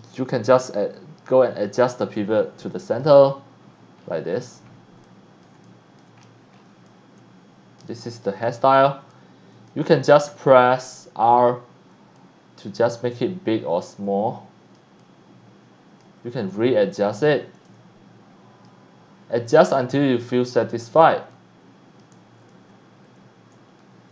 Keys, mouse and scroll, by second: 1.0-2.1 drag, 2.9 click, 3.7 scroll up 1, 4.0-4.4 scroll down 2, 4.4-4.7 scroll up 2, 5.0 x, 5.0 click, 5.5 c, 5.6 click, 6.2-6.6 scroll up 2, 6.8 x, 6.8-7.8 drag, 7.2 c, 8.1 click, 8.3 click, 8.7 scroll down 1, 9.0 x, 9.1-9.7 drag, 10.3 e, 11.1 e, 12.1-14.8 drag, 15.0 alt+click, 16.5 a, 17.7 click, 19.6-20.9 drag, 21.3-22.0 ctrl+drag, 22.2 e, 22.5 d, 23.8 a.